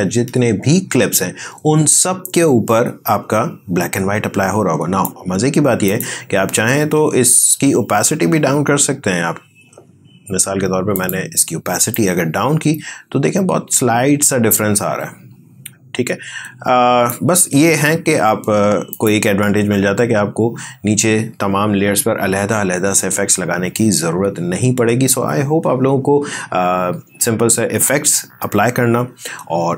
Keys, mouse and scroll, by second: 5.8 click, 10.9-18.8 drag.